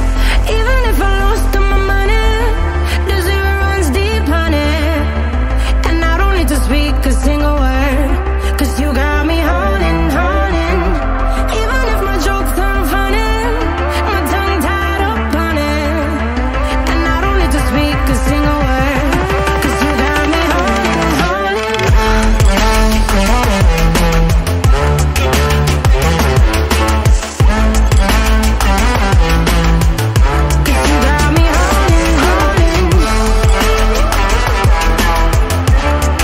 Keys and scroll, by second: 1.2 p, 13.3-14.3 scroll, 24.5 ctrl+z, 25.0 ctrl+z, 25.7 ctrl+alt+z, 28.3 Caps_Lock.